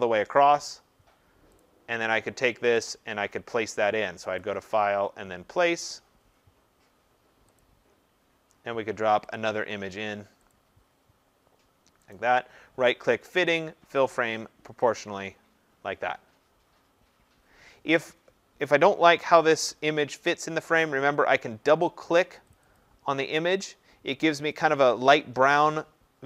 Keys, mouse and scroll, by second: 1.6 click, 2.8 click, 7.6 click, 9.4 click, 10.5 click, 12.1 right click, 15.0 click, 22.5 click, 22.7 click.